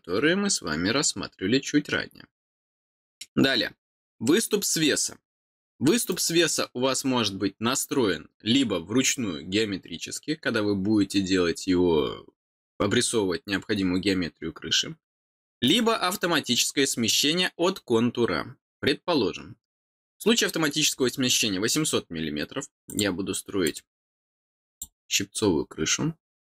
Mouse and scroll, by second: 6.0 click, 15.6 click, 22.8 click, 23.6 click, 24.6 click, 26.2 click.